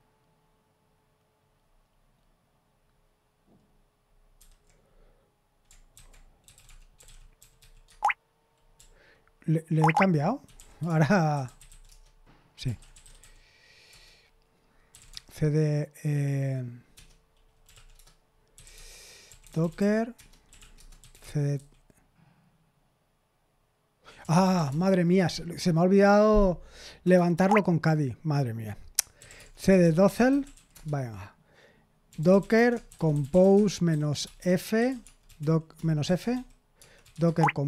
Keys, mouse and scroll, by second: 4.3 super+8, 5.9 ctrl+c, 6.2-15.5 typing, 13.9 Return, 16.9 Return, 17.4-21.7 typing, 24.3 BackSpace, 24.5 BackSpace, 24.6 BackSpace, 25.3 c, 27.1 BackSpace, 27.3 BackSpace, 28.9-37.6 typing.